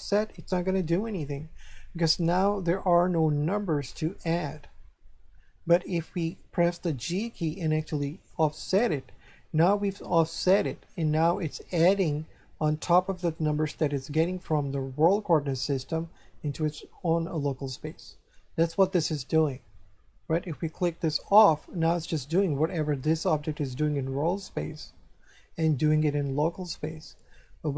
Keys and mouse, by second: 7.3 g, 8.7 click, 13.2 right click, 15.5 right click, 21.1 click.